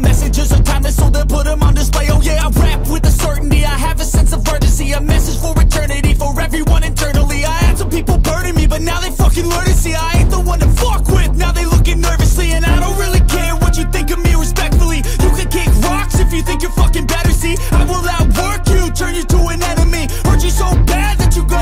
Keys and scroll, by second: 0.1 Up, 0.3 Return, 1.7 Down, 1.9 Down.